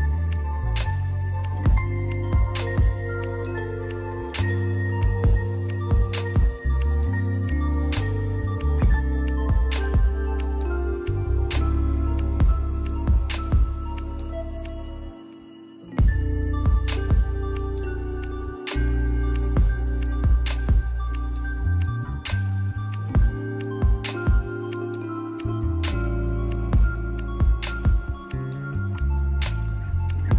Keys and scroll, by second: 15.8 ].